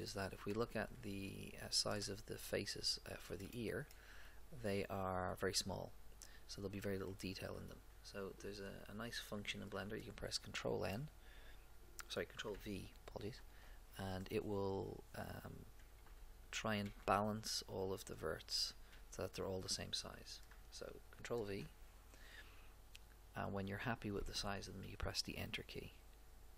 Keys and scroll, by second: 11.0 ctrl+n, 13.3 ctrl+v, 16.0 a, 18.5 a, 21.4 ctrl+v.